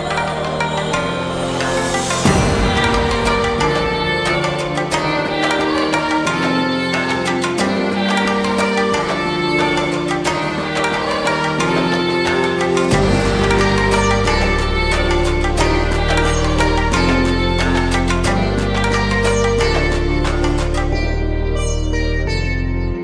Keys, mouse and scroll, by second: 1.7 5, 2.6 Return, 5.8 click, 8.9 alt+click, 11.4 alt+scroll up 1, 12.6 space, 12.8-13.4 click, 13.1 space, 13.7 click, 14.0 space, 14.7 click, 15.4 alt+scroll up 1, 17.6 ctrl+0, 21.9 click.